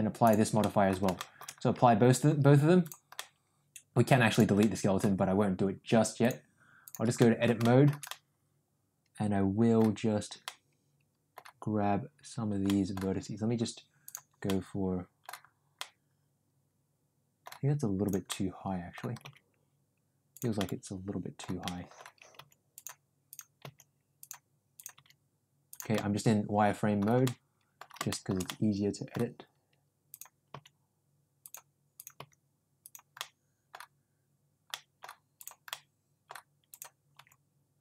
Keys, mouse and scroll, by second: 0.5 middle drag, 1.0 shift+middle drag, 3.1-4.0 middle drag, 4.3 drag, 4.5-4.9 middle drag, 6.3 click, 7.3 middle click, 7.7 shift+middle click, 8.2-9.9 middle drag, 10.5 middle click, 12.7 middle click, 14.1 click, 14.5 middle click, 15.8-17.5 middle drag, 18.3 middle click, 19.3 g, 20.8 middle click, 21.8 middle click, 22.4 g, 23.7 g, 25.0 g, 26.0-27.1 middle drag, 27.4 middle click, 28.2 shift+middle click, 28.6 middle click, 30.1 click, 30.5 g, 32.2 g, 33.3 middle click, 34.7 middle click, 35.4 click, 35.7 middle click, 37.2 g.